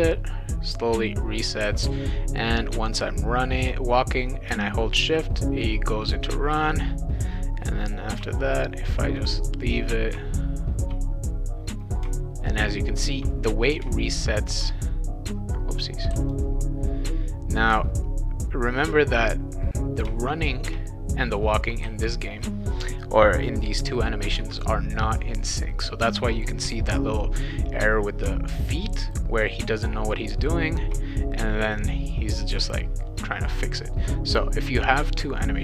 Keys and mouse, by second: 1.4-2.3 typing, 4.5 shift+w, 8.2 shift+w, 10.1 shift+w, 12.0 shift+w, 13.8 shift+w, 16.2 click, 21.8 w, 26.6 w, 35.4 click.